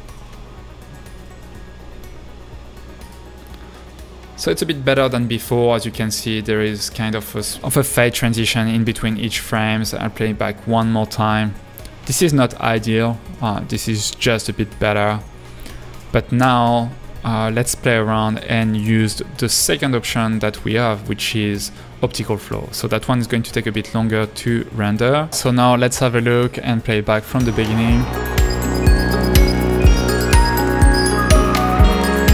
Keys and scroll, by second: 9.1 space, 9.9 space, 16.6 space.